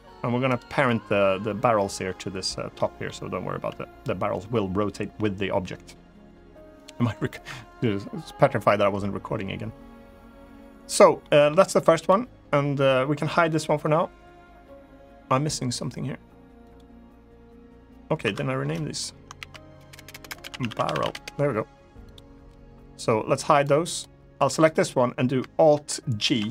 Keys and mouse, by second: 0.2 right click, 2.5 middle click, 6.5 click, 10.9 middle drag, 17.9 F2, 19.6 BackSpace, 19.8 BackSpace, 20.5 r, 23.3 click, 24.3 click, 25.9 alt+g.